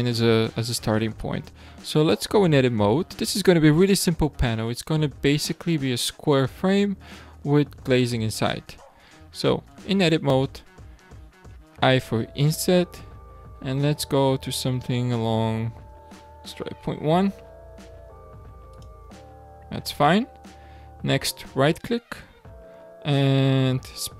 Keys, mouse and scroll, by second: 0.5-0.9 scroll up 2, 0.9-1.8 shift+middle drag, 1.8-4.9 scroll up 2, 9.7 Tab, 10.4-11.7 shift+middle drag, 11.7 i, 20.0-20.6 middle drag, 20.6-21.5 scroll down 1, 21.5-24.1 right drag.